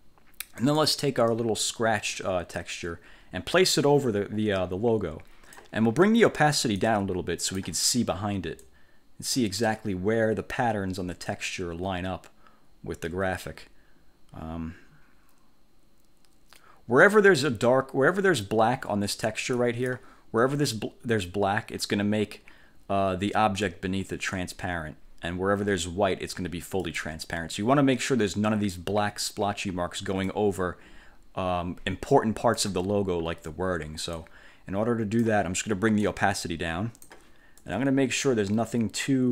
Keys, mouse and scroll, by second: 0.7 click, 1.4-5.8 drag, 6.9 click, 8.7-17.4 drag, 19.6 click, 26.9 click, 30.4-32.9 drag, 34.3-35.6 drag, 37.7-39.3 drag.